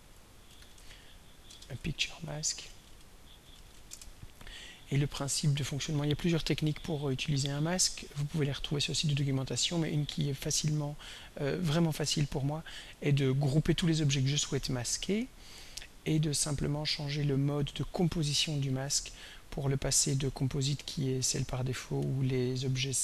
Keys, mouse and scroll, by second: 0.3-4.3 typing, 1.8 shift+End, 5.9 click, 6.6 click, 12.4 shift+click, 14.5 click, 15.9 click, 16.6 click, 19.5 click, 20.1 click, 20.9 click, 22.8-23.0 scroll down 1.